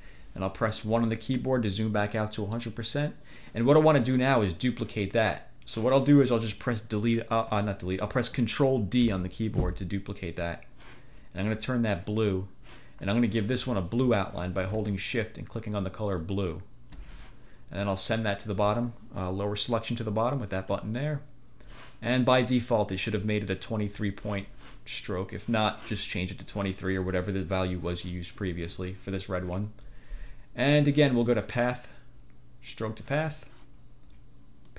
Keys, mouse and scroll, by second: 1.4 1, 2.2 click, 9.2 ctrl+d, 12.0 click, 16.3 shift+click, 20.7 click, 31.8 click, 32.8 click.